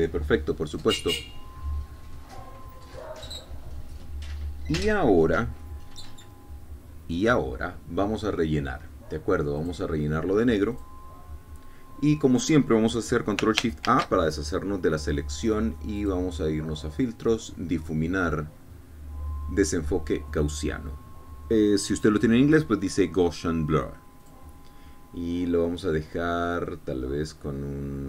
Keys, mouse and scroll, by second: 10.6 click, 11.8 click, 14.8 ctrl+shift+a, 17.0 click, 25.3 click, 27.8-28.0 scroll up 2.